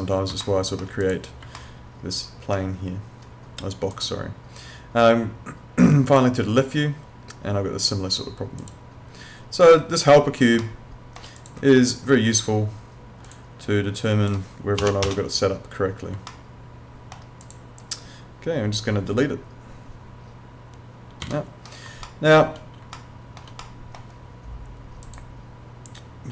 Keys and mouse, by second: 0.4 alt+middle click, 1.0 click, 1.6 alt+middle click, 3.9 click, 9.6 click, 10.6 alt+middle click, 11.4 click, 14.8 BackSpace, 16.3 alt+middle click, 17.4 click, 22.1 alt+middle click, 23.0 alt+middle click, 25.1 click.